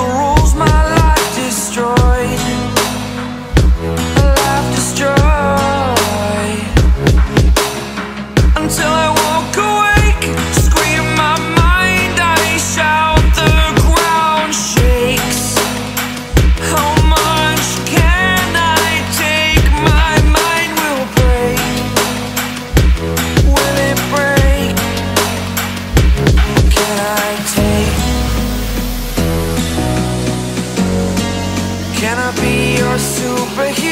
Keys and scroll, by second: 5.9 v, 11.7 super+x, 15.2 super+z, 17.7 super+f, 22.9 a, 25.4 Delete.